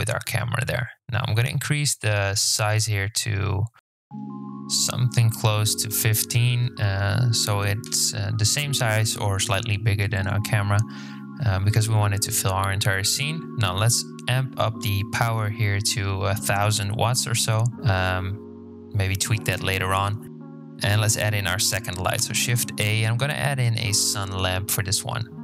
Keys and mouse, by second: 0.5 KP_7, 2.7-4.5 drag, 6.1-9.1 drag, 9.9-12.0 drag, 11.3 KP_0, 14.1-16.0 drag, 15.2 KP_0, 15.4 KP_0, 17.6 click, 20.7 shift+a, 25.0 g.